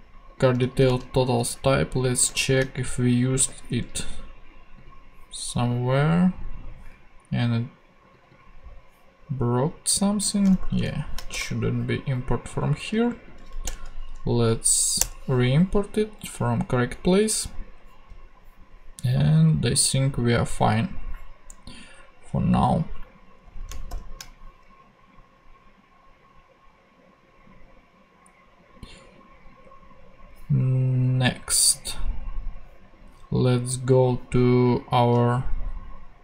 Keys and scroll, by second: 0.9 super+c, 2.4 shift+super+f, 3.3 shift+super+v, 10.6 shift+Right, 11.3 shift+BackSpace, 12.2 BackSpace, 13.6 alt+Return, 15.0 Return, 23.9 shift+super+p.